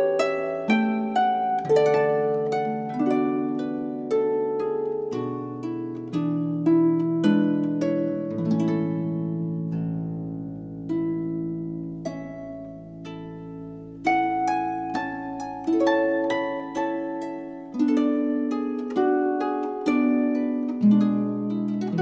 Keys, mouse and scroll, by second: 5.5-7.2 drag, 8.0 i, 10.6 middle click, 11.9-13.4 drag, 13.5 click, 13.5-15.4 right drag, 14.5 r, 15.7-17.4 right drag, 17.7-19.4 right drag, 19.7 a.